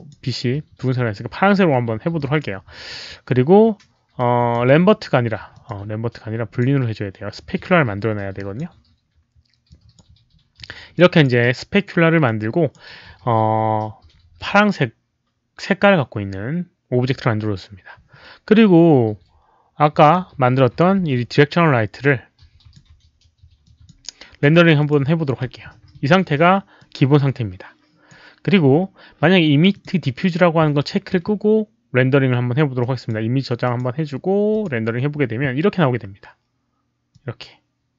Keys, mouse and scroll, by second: 2.1 click, 4.1 click, 5.5 click, 6.5 click, 8.3 drag, 9.6 click, 10.9 click, 12.2 click, 20.0 click, 20.9 w, 22.0 click, 23.6 click, 24.7 click, 26.7-28.0 drag, 29.7 click, 32.7 drag, 33.6 click, 34.5 click, 37.0-37.9 drag.